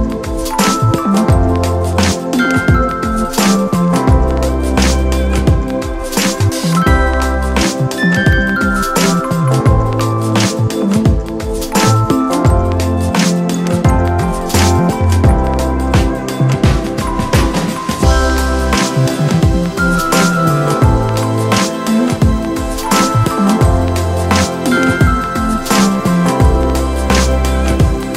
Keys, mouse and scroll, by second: 4.8 [, 17.9 ctrl+0.